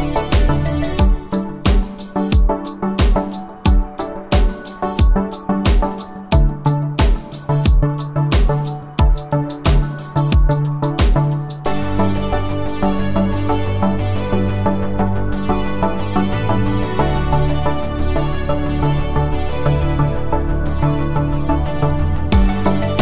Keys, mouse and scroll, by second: 4.6 space, 6.1 s.